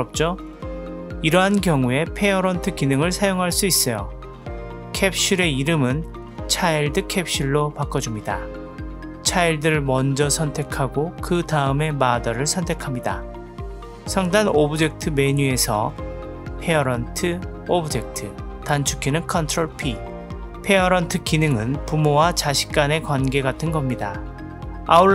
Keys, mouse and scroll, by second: 0.1 ctrl+z, 0.5 ctrl+z, 1.4 click, 1.6-2.5 middle drag, 2.7-8.3 drag, 9.4 click, 17.3 click, 17.5-19.7 right drag, 22.0 n.